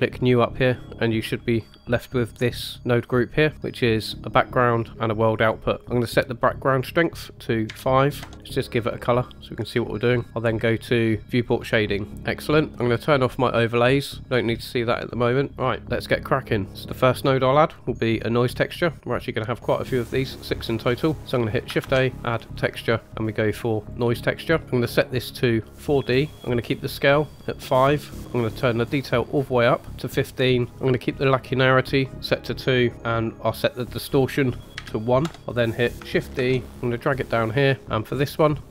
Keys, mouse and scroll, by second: 3.5 middle click, 3.9 click, 4.8 click, 5.4 click, 6.4-8.1 drag, 8.3-8.8 drag, 11.8 drag, 14.1 click, 15.5 scroll down 3, 15.7 middle click, 16.7 ctrl+z, 21.7 shift+a, 25.0-26.3 drag, 28.7 click, 33.9-35.2 drag, 36.3 shift+d, 37.8 middle click.